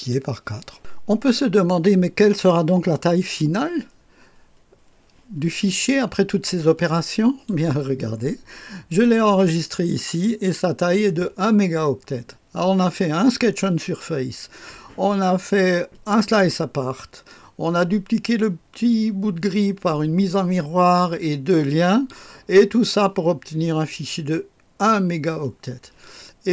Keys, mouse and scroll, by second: 5.6-7.4 drag, 7.6 click, 8.8 click.